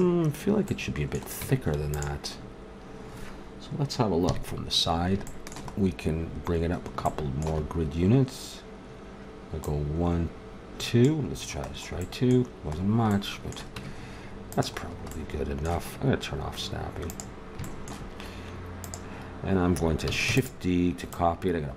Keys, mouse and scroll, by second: 0.7 middle click, 1.4 Tab, 4.2 KP_3, 6.2 middle click, 9.6-11.3 middle drag, 13.8 Tab, 17.1 click, 17.6-20.2 middle drag, 20.2 shift+d.